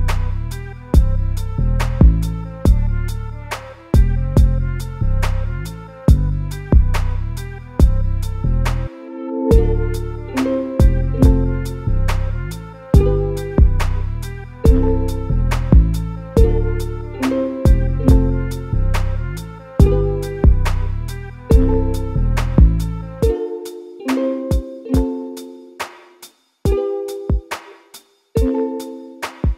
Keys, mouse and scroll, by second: 1.3 click, 1.8 click, 2.5 r, 8.1 click, 9.0-9.5 shift+middle drag, 9.5 scroll up 1, 9.7 Tab, 10.2 a, 11.2 g, 12.8 a, 13.0 a, 13.3 Tab, 13.6 a, 13.8 a, 14.3-15.0 shift+middle drag, 15.0-15.7 scroll up 2, 15.7-16.4 shift+middle drag, 16.4 click, 16.8 Tab, 17.2 2, 17.5 click, 17.7 click, 18.0 s, 19.9 click, 20.1 click, 20.7 click, 20.9 click, 21.4 g, 23.3 a, 23.5 a, 23.7 Tab, 23.9 scroll down 2, 24.1 a, 24.2 a, 24.5-24.9 scroll up 2, 24.9-29.2 shift+middle drag, 29.2 Tab.